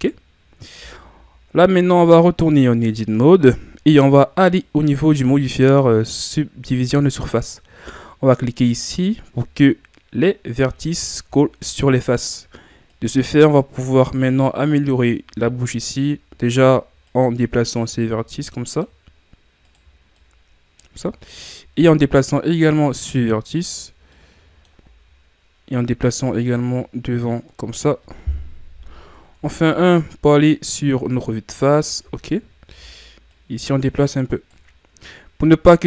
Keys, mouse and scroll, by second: 0.0-0.7 scroll up 2, 0.7 Tab, 1.3-1.9 ctrl+scroll up 1, 1.9-3.4 scroll up 1, 4.6 click, 8.9 click, 10.3-11.5 scroll down 5, 11.5-12.9 shift+scroll up 6, 12.9-14.8 right drag, 14.8-17.1 drag, 17.1 right click, 17.7-19.6 drag, 19.6 right click, 20.2 click, 21.0-21.9 scroll up 1, 21.9-23.8 right drag, 23.8-24.2 scroll down 5, 24.2 middle click, 24.8-26.0 scroll up 2, 26.0-28.7 drag, 28.7 KP_1, 29.5 Tab, 29.8-30.8 scroll down 11, 30.8-32.1 scroll up 9, 32.1-32.7 scroll up 2, 32.7 Tab, 33.3-35.8 right drag.